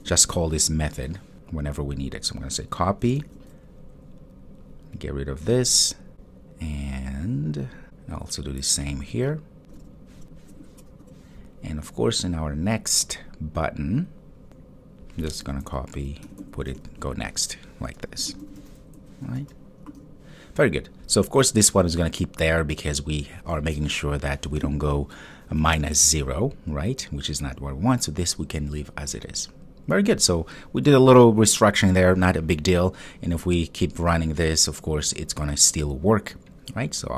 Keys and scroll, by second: 0.5 super+v, 3.6 super+c, 9.8 super+v, 16.9 super+v, 31.2 super+s.